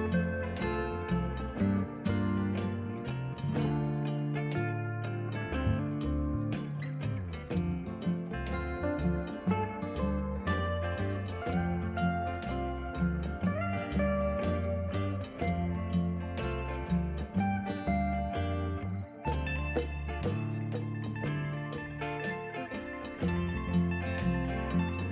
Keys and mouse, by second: 2.2 click, 3.5 click, 4.1 click, 4.2 ctrl+e, 4.3 click, 5.1 a, 5.2 click, 7.8 ctrl+q, 7.9 click, 9.3 click, 10.8 click, 12.3 c, 12.5 click, 13.0 ctrl+e, 13.1 click, 13.5 c, 13.6 click, 14.2 e, 14.6 click, 15.0 a, 15.1 click, 16.0 ctrl+1, 16.2 click, 16.4 x, 16.6 click, 17.0 shift+click, 17.1 a, 17.3 click, 18.1 click, 18.3 ctrl+shift+x, 18.4 click, 19.3 click, 19.4 x, 19.6 click, 20.5 Return, 20.7 a, 21.0 click, 21.7 Escape, 22.3 click, 22.6 ctrl+shift+a, 22.9 click, 23.9 ctrl+q, 24.0 click, 24.5 e.